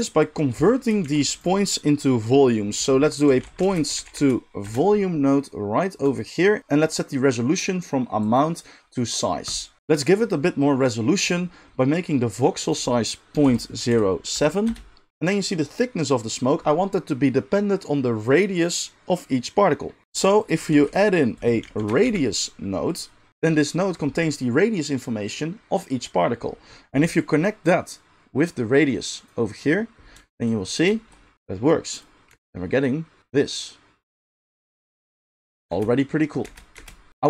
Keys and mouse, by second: 1.0 shift+a, 6.1-8.3 middle drag, 8.3-20.5 drag, 20.5-27.1 shift+middle drag, 20.7 shift+a, 27.1-37.2 drag, 32.3 space, 35.7 space, 36.4 space, 36.7 space, 37.1 space.